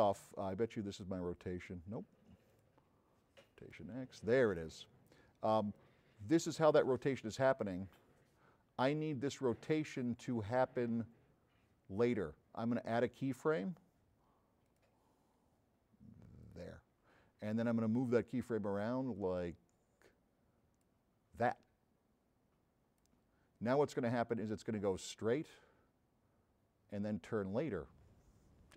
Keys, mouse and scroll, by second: 0.7 click, 2.6 click, 3.6 click, 5.8-12.1 drag, 14.7 drag, 16.5 click, 19.2-21.0 drag, 21.6-23.0 drag.